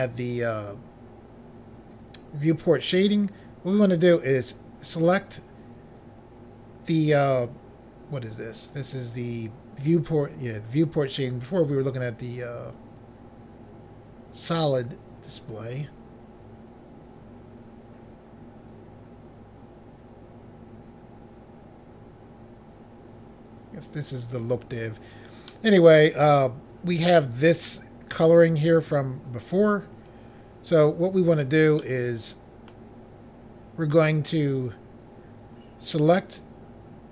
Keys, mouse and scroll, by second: 4.0 click, 4.1 click, 25.5 middle click, 28.9 scroll up 1, 30.1 click, 31.8 middle click, 35.8 click, 36.0 click.